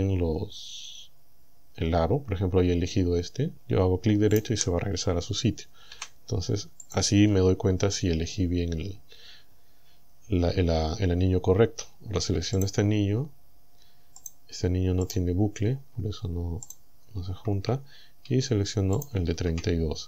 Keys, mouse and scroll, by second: 4.4 right click, 6.0 Delete, 6.9 click, 12.6 alt+shift+right click, 14.2 alt+shift+right click, 15.1 alt+shift+right click, 16.7 alt+shift+right click, 17.9 scroll up 2, 19.0 alt+shift+right click, 19.7-20.0 scroll down 2.